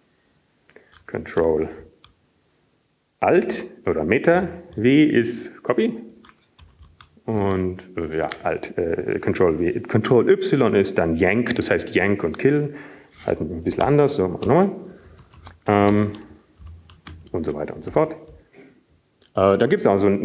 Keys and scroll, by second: 2.5 Up, 2.5 Down, 2.5 ctrl+y, 4.9 Down, 4.9 ctrl+space, 8.2 alt+w, 9.8 Return, 10.7 ctrl+y, 16.9 Return, 16.9 ctrl+y, 18.4 Return, 18.4 Up, 19.4 Up, 19.4 ctrl+space, 19.4 Down, 19.9 Down.